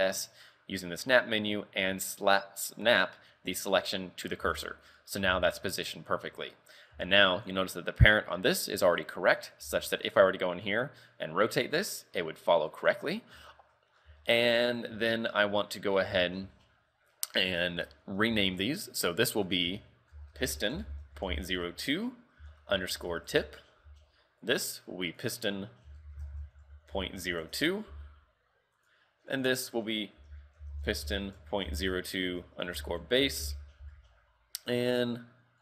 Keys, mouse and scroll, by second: 4.3 scroll down 5, 4.5 z, 4.8 shift+middle click, 5.1 scroll up 3, 5.3 z, 5.6 shift+middle click, 6.3 a, 6.6-7.0 scroll down 3, 7.0 a, 7.4 right click, 9.1 scroll down 1, 9.7 Tab, 10.0 right click, 12.0-12.8 scroll up 4, 12.8 right click, 13.6 shift+middle click, 14.0 scroll down 4, 14.3 shift+middle click, 14.6 scroll up 4, 15.1 shift+middle click, 15.8 right click, 18.4 shift+middle click, 19.5 click, 24.5 right click, 25.3 click, 28.9 right click, 29.4 click, 29.7 click, 34.7 right click.